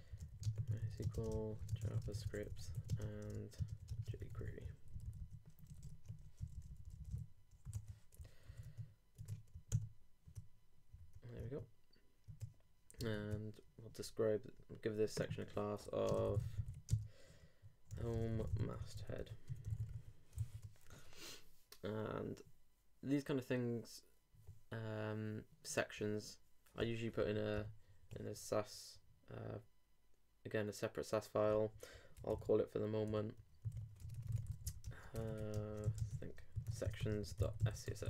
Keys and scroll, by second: 0.0-4.6 typing, 4.8 alt+Left, 5.7 alt+Right, 8.2 super+c, 8.5 super+s, 8.6 super+Tab, 9.7 super+r, 11.4 super+Tab, 16.9 shift+=, 17.9 shift+h, 20.3 super+d, 27.5 alt+super+n, 34.8-37.0 typing.